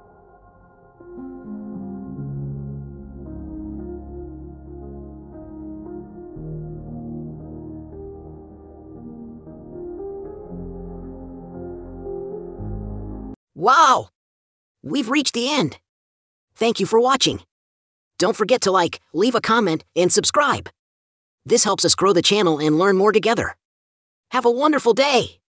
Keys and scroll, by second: 3.8 ctrl+c, 4.0 ctrl+v, 4.8-5.4 scroll, 5.7-6.3 scroll up 1, 7.6-8.0 scroll down 1, 8.2 scroll.